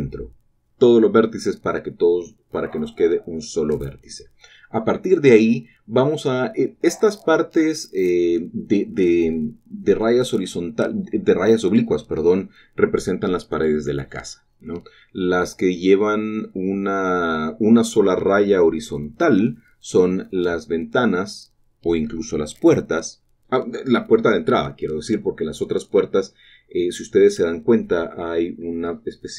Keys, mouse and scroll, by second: 1.6-4.2 drag, 4.5 g, 7.5-8.6 drag, 8.6-9.0 scroll up 1, 9.5 shift+middle click, 9.6-17.8 shift+middle drag, 17.8-18.6 scroll down 2, 18.6 middle click, 19.4 middle click, 19.6 middle click, 19.8 middle click, 20.0 middle click, 21.3 middle click, 21.7-22.8 middle drag, 22.8-23.6 scroll down 2, 23.2-24.5 shift+middle drag, 25.5 7, 27.5-28.3 scroll up 1.